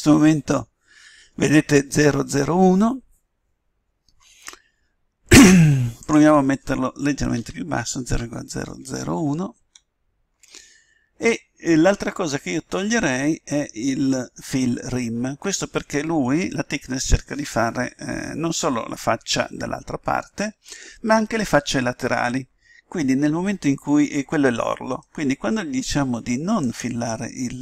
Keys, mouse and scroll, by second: 6.0-7.6 drag.